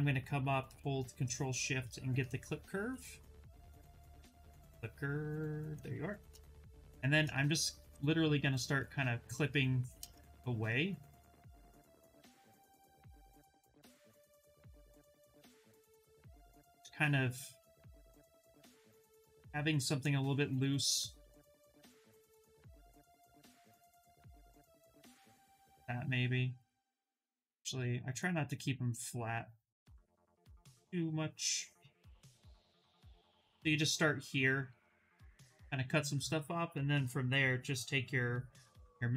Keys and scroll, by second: 20.2 shift+f, 26.4 z, 38.2 s.